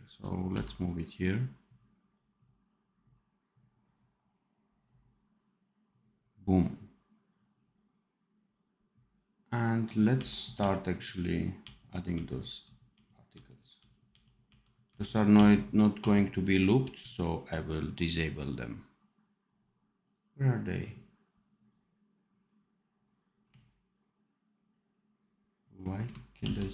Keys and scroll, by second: 0.4 v, 10.0 r, 13.3 r, 14.0 r, 15.9 r, 26.4 ctrl+s.